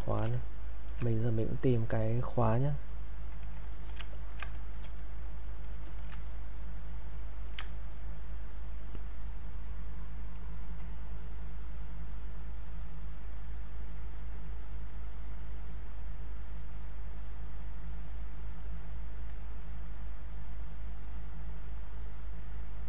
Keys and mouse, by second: 0.0 alt+click, 0.4 ctrl+right click, 0.5 ctrl+right click, 1.8 click, 3.7 alt+click, 4.2 ctrl+right click, 4.6 ctrl+alt+click, 5.0 click, 5.9 alt+click, 6.3-10.1 ctrl+right drag, 10.1 click, 14.3 click, 16.9 click.